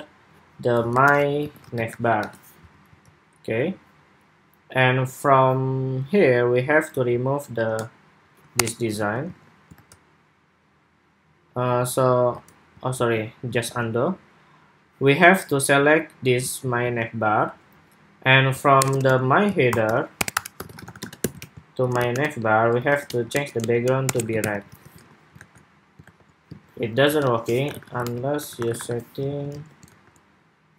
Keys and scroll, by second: 2.6 super+s, 8.7 super+s, 9.0 super+Tab, 9.5 super+r, 12.1 super+Return, 12.7 super+z, 13.4 super+s, 16.5 super+c, 16.6 super+c, 21.2 super+v, 24.4 super+s, 24.7 super+Tab, 25.1 super+r, 25.9 super+r, 26.3 super+Tab, 29.3 super+Tab, 29.7 super+r.